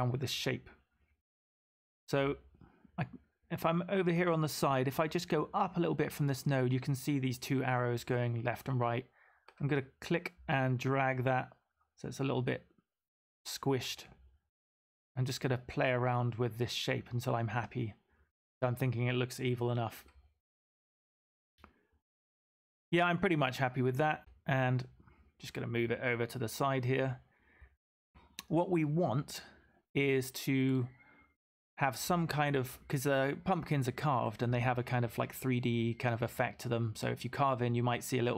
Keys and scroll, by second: 8.9 v, 21.1 v, 24.2 v.